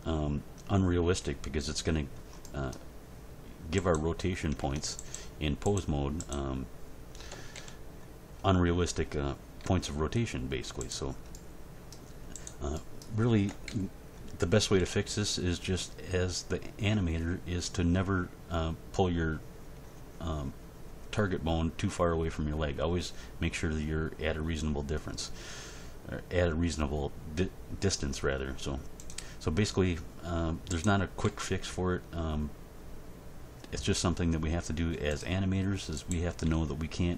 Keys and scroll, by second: 4.6 Tab, 7.3 End, 7.5 Page_Down, 9.6 r, 13.5 End, 13.7 Page_Down, 14.8 g, 31.2 g, 36.4 g.